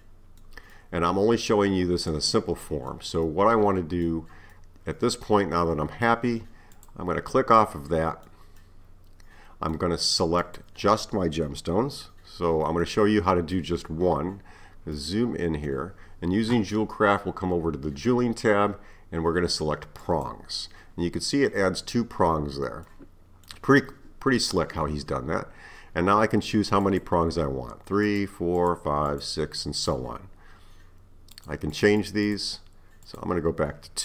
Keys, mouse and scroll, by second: 6.8 click, 7.4-10.4 middle drag, 10.4 click, 12.8-14.1 middle drag, 14.1-15.0 scroll up 4, 15.0-18.0 middle drag, 20.0-22.9 drag, 22.9-25.9 middle drag, 26.8-30.3 drag, 31.4-34.0 drag.